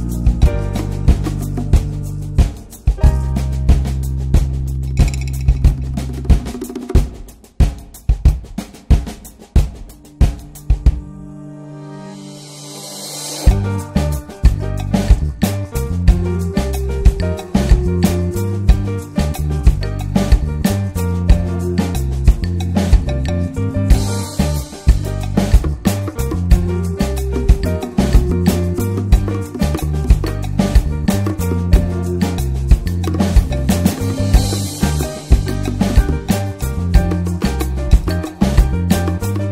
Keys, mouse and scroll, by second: 0.5 alt+middle click, 1.4 alt+middle click, 2.0 r, 3.0-4.1 middle drag, 4.1 r, 8.1 s, 9.3 r, 10.4 scroll down 1, 10.4 click, 10.7 middle click, 11.1 click, 11.3 scroll down 2, 11.4-11.8 middle drag, 11.8 click, 12.2-12.6 alt+middle drag, 12.8-13.1 alt+shift+middle drag, 13.3-13.7 shift+middle drag, 13.7 shift+d, 14.6 r, 15.8 middle click, 15.9-17.2 scroll up 4, 16.1-16.5 alt+middle drag, 16.7 shift+middle click, 17.2-17.8 drag, 17.8 alt+z, 18.0-18.3 scroll up 2, 18.3 r, 19.3 click, 20.2 r, 21.5 click, 22.5 r, 23.2-23.6 scroll up 2, 23.6 click, 24.5 r, 25.1 scroll down 3, 25.3 middle drag, 25.5 alt+z, 25.7 click, 25.9 middle click, 26.5 drag, 26.7 shift+middle click, 27.0 s, 27.6-28.1 scroll down 5, 27.9 click, 28.1 middle drag, 28.2-28.8 shift+scroll up 2, 28.3-28.6 shift+middle drag, 28.8 ctrl+s, 30.4-31.5 middle drag, 31.5 ctrl+s, 31.9-32.6 shift+middle drag, 32.6 ctrl+s, 32.8-33.2 shift+middle drag, 33.7-34.7 shift+middle drag, 34.7 click, 34.8 scroll down 2, 35.0 middle drag, 35.2 ctrl+s, 35.5 click, 36.3 ctrl+s, 37.3-38.5 drag, 38.7 scroll up 2, 39.0-39.5 shift+middle drag.